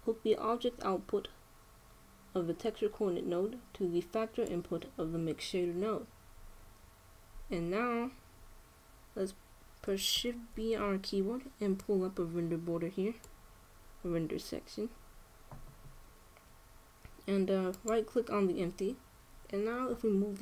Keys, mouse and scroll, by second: 0.6-2.4 drag, 7.1-11.3 middle drag, 11.3 shift+b, 15.1-17.7 middle drag, 18.4-20.3 right drag.